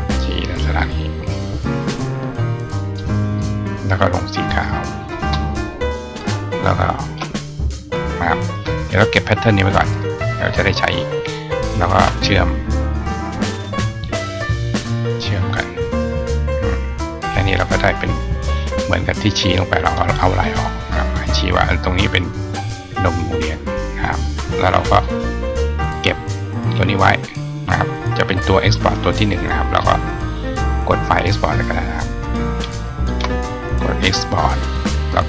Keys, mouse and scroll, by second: 0.1 click, 1.0 click, 1.5 click, 2.7 click, 4.9 click, 5.9 click, 6.9 shift+click, 8.8-9.8 drag, 9.6 right click, 11.0 click, 15.9 click, 18.0 click, 19.6 click, 20.7 click, 23.8-24.8 drag, 26.1-28.6 drag.